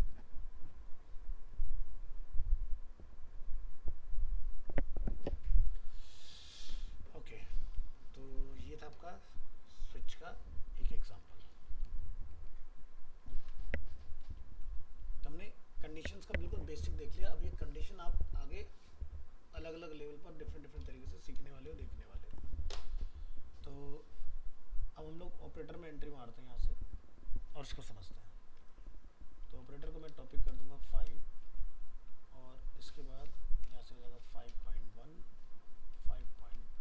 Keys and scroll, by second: 11.8 ctrl+s, 13.2 ctrl+w, 14.7 ctrl+s, 16.0 ctrl+w, 21.7 ctrl+s, 22.1 ctrl+w.